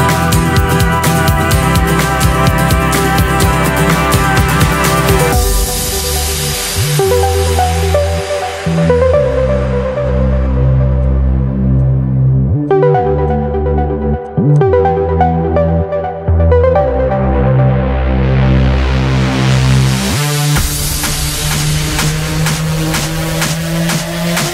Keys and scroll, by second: 19.1 ctrl+d.